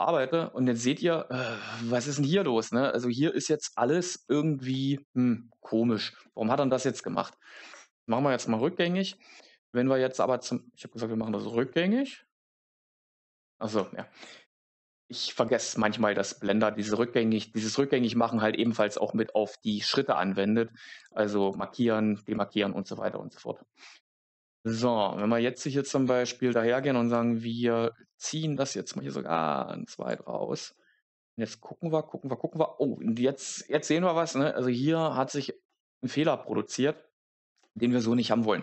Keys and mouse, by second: 7.0 Tab, 8.7 ctrl+z, 9.9 Tab, 11.9 ctrl+z, 12.9 ctrl+z, 18.5 right click, 27.0 g, 29.9 click, 35.6 middle click.